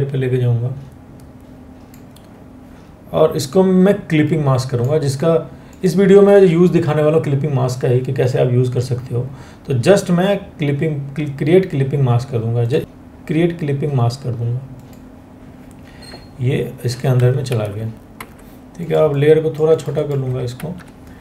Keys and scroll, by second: 17.1 ctrl+t, 17.7 Escape, 20.1 ctrl+t.